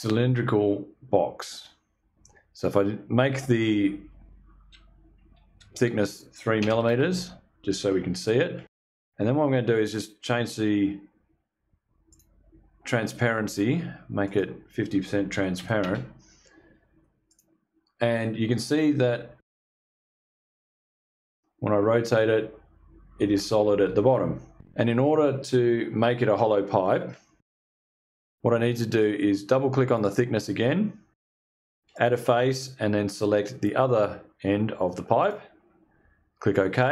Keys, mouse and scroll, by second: 5.0 2, 6.1 BackSpace, 6.2 3, 6.4 Return, 9.3 click, 11.6 click, 12.6 click, 13.7 click, 14.8 5, 15.1 0, 15.3 Return, 16.8 click, 20.2-24.6 shift+drag, 29.3 click, 31.4 click, 34.7 click, 36.3 click.